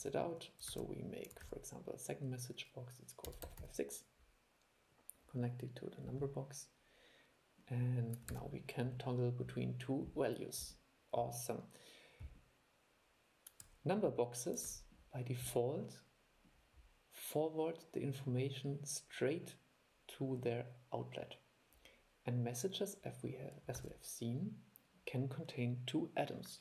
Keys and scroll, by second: 0.9 super+e, 1.6 super+2, 8.5 super+e, 14.8 super+e, 24.0 super+2.